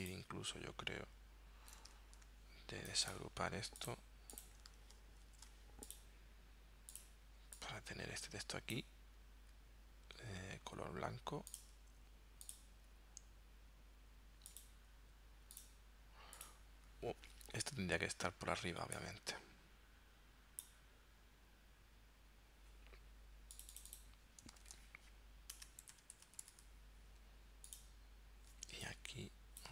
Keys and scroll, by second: 5.4 shift+super+g, 24.7 super+a, 25.9-26.6 typing.